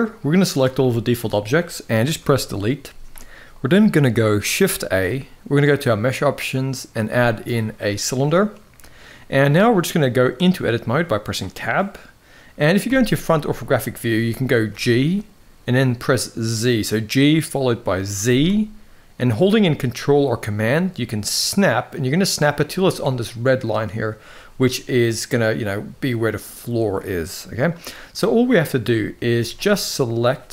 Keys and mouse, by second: 0.5-1.9 shift+middle drag, 1.9 Delete, 4.5 shift+a, 8.4 middle drag, 10.2 Tab, 12.6 KP_1, 14.4 g, 24.4 middle click, 27.1 middle click, 27.9 middle click, 28.6 middle click, 29.1 alt+a.